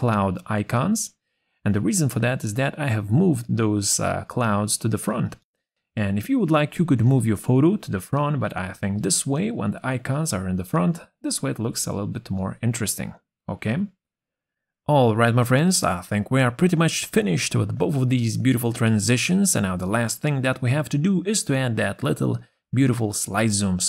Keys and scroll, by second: 8.6 ctrl+z.